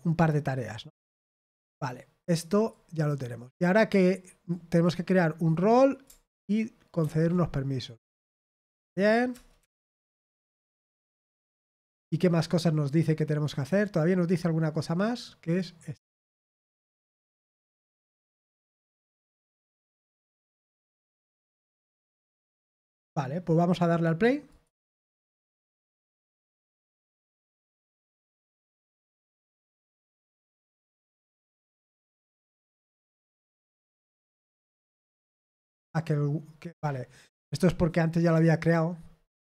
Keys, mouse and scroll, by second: 2.4 click, 2.8 click, 3.4-3.8 scroll down 2, 4.4-6.2 drag, 7.0 ctrl+c, 7.8 click, 9.3 Return, 9.5 Return, 10.1 BackSpace, 10.6 BackSpace, 11.1 ctrl+v, 12.0-13.0 scroll down 1, 14.2 click, 15.4 click, 17.0-18.0 drag, 19.0 click, 19.4 click, 20.0 click, 21.1 Return, 21.3 Return, 21.8 ctrl+v, 22.7 scroll down 1, 24.4 click, 30.8 click, 32.4 click, 32.7 click, 34.1 click, 34.3 click.